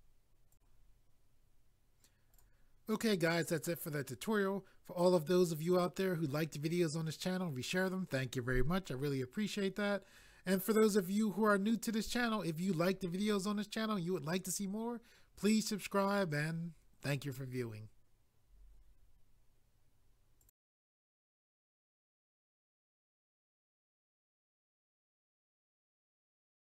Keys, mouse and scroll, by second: 0.5 click, 0.6 click, 2.3 click, 20.4 click.